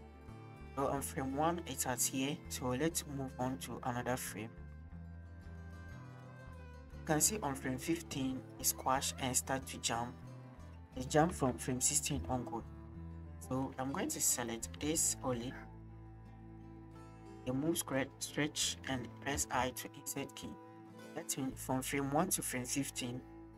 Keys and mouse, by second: 2.7-6.9 middle drag, 9.4 click, 11.3 Right, 12.2 Left, 13.4 shift+click, 13.8 click, 14.8 shift+drag, 15.7 click, 17.3 click, 19.3 i, 20.9-23.5 drag.